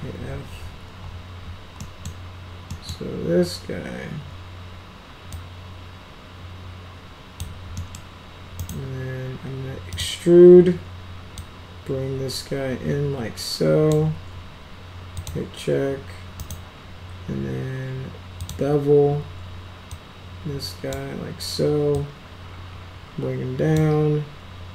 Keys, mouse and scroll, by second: 0.0-0.1 typing, 1.7 middle click, 2.7 middle click, 5.2-7.3 drag, 7.7 middle click, 8.5 right click, 9.9 click, 11.3-13.9 drag, 15.1 click, 16.3 right click, 18.3 click, 19.8-20.8 drag, 21.9-23.7 drag.